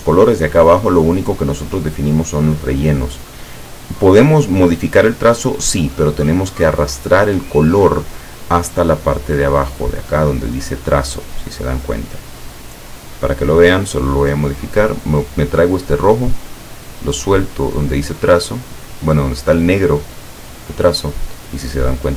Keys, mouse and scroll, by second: 13.2-20.8 drag.